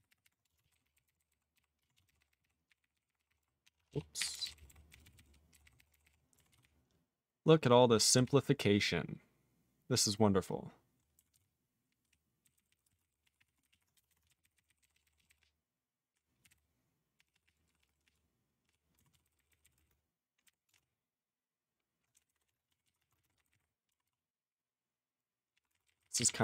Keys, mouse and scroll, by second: 0.1 ctrl+r, 0.2 ctrl+r, 0.5 Return, 0.6 ctrl+a, 0.7 ctrl+k, 0.8 ctrl+k, 1.0 ctrl+k, 1.0 ctrl+k, 1.2 ctrl+k, 1.3 ctrl+k, 1.5 ctrl+k, 2.0 ctrl+s, 2.0 ctrl+k, 2.2 ctrl+k, 2.3 ctrl+k, 2.4 ctrl+k, 2.7 ctrl+n, 2.8 ctrl+n, 2.9 ctrl+n, 3.0 ctrl+n, 3.2 ctrl+k, 3.3 ctrl+k, 3.4 ctrl+k, 3.6 ctrl+/, 3.8 ctrl+/, 4.2 ctrl+n, 4.3 ctrl+k, 4.4 ctrl+k, 4.5 ctrl+k, 4.7 ctrl+k, 4.9 ctrl+n, 5.0 ctrl+n, 5.1 ctrl+n, 5.5 ctrl+k, 5.6 ctrl+k, 5.8 ctrl+k, 5.9 ctrl+k, 6.0 ctrl+k, 6.6 ctrl+s, 6.6-8.1 ctrl+n, 8.2-11.0 ctrl+p, 11.3 ctrl+s, 11.4-12.0 ctrl+p, 12.4 ctrl+n, 12.5 ctrl+n, 12.7 ctrl+n, 12.8 ctrl+space, 12.9 ctrl+n, 13.0 ctrl+n, 13.2 ctrl+p, 13.4 ctrl+p, 13.5 ctrl+e, 13.6 ctrl+n, 13.7 ctrl+e, 13.9 BackSpace, 14.1 BackSpace, 14.3 ctrl+a, 14.4 ctrl+n, 14.5 ctrl+n, 14.7 ctrl+n, 14.8-15.3 ctrl+k, 15.4-16.1 ctrl+p, 16.4 ctrl+2, 16.5 ctrl+k, 17.2 ctrl+p, 17.3 ctrl+p, 17.4 ctrl+p, 17.6 ctrl+p, 17.8 ctrl+p, 18.0 ctrl+p, 18.7 ctrl+p, 19.2 ctrl+s, 19.2 ctrl+n, 19.3 ctrl+n, 19.5 ctrl+n, 19.6 ctrl+n, 19.7 ctrl+space, 19.8 ctrl+e, 19.8 ctrl+n, 20.4 ctrl+g, 20.7 ctrl+space, 20.7 ctrl+a, 20.7 ctrl+p, 22.1 BackSpace, 22.3 BackSpace, 22.4 BackSpace, 22.9 ctrl+s, 23.0 ctrl+a, 23.1 ctrl+space, 23.1 ctrl+e, 23.2 ctrl+n, 23.4 ctrl+n, 23.4 ctrl+g, 23.5 ctrl+n, 24.0 ctrl+s, 25.5 ctrl+p, 25.7 ctrl+space, 25.7 ctrl+n, 25.8 ctrl+n, 26.2 ctrl+e, 26.2 ctrl+n.